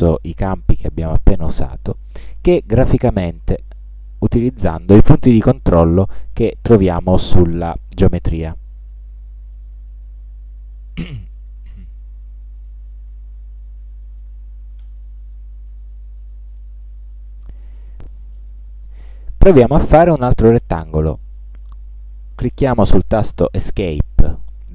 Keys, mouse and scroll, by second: 2.7-4.0 drag, 4.9-6.4 drag, 8.2-9.2 drag, 9.8-12.2 drag, 12.9 click, 14.9 click, 15.8-16.8 drag, 24.5 Escape.